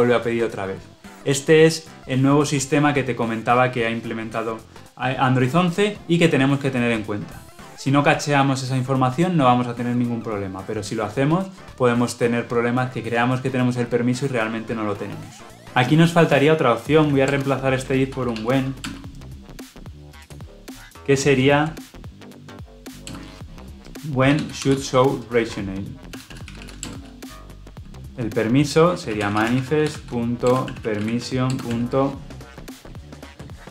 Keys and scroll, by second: 15.5 alt+Return, 17.1 alt+Return, 26.8 Return.